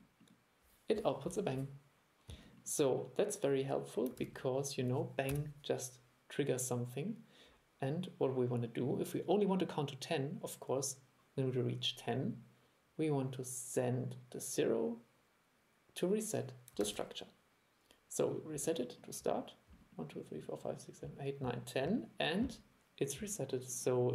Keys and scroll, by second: 4.3 super+e, 16.9 super+e.